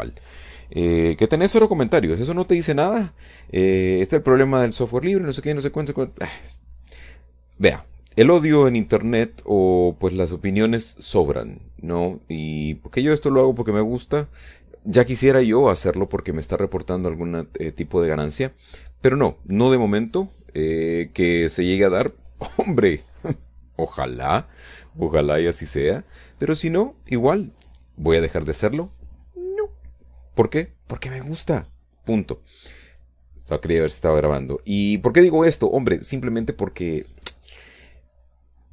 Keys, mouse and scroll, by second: 35.2 click, 35.6 click, 37.4-38.7 middle drag.